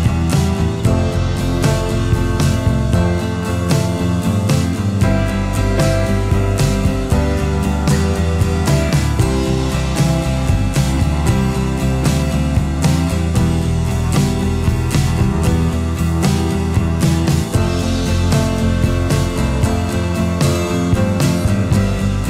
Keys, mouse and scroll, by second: 13.6 space.